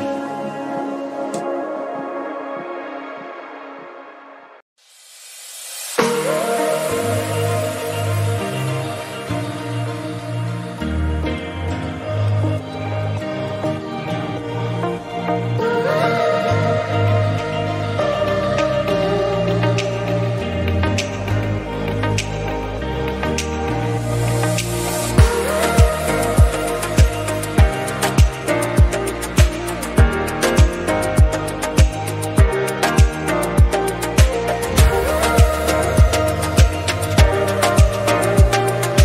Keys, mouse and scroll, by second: 0.0-2.6 middle drag, 2.6-3.3 scroll up 1, 3.3-4.1 shift+middle drag, 4.1 scroll up 1, 4.3-5.6 middle drag, 5.6-5.9 scroll down 1, 5.9 click, 6.1-7.2 right drag, 7.2 click, 7.4 right click, 7.9 click, 8.1 click, 8.7 click, 9.5 click, 10.0 click, 10.4 click, 10.5 scroll down 3, 10.6 middle click, 11.2 scroll down 1, 11.4-12.1 middle drag, 12.1-13.3 drag, 13.4 scroll down 2, 13.5 middle click, 14.3-16.1 drag, 16.7 shift+middle drag, 16.9 scroll up 1, 17.1-18.8 middle drag, 18.8 KP_1, 19.5-20.7 scroll up 7, 20.7-21.1 scroll up 2, 21.2 shift+middle click, 21.9 Tab, 23.4-24.4 scroll down 4, 24.4 Tab, 24.6 click, 24.8 scroll down 2, 25.0-26.3 shift+middle drag, 26.3-26.7 scroll up 2, 26.7 click, 27.3 KP_Decimal, 27.8 scroll up 3, 27.9 Tab, 28.2 middle click, 28.4 scroll up 1, 28.7-30.2 shift+middle drag, 30.7 3, 31.2 click, 32.3 click, 34.0 Tab, 34.1 drag, 34.3 click, 34.9-35.6 drag, 35.7 click, 35.9 Tab, 36.9 click, 37.6 click.